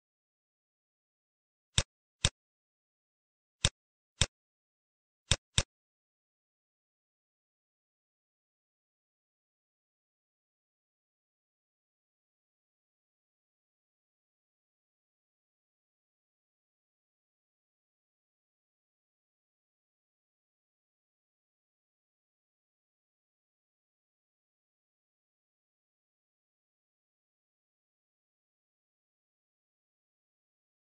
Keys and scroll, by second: 3.1 ctrl+z, 15.7 Down, 20.1 t.